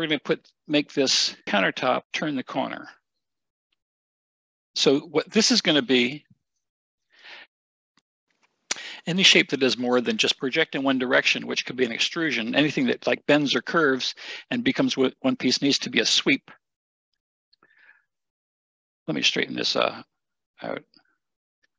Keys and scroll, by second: 17.1 Delete.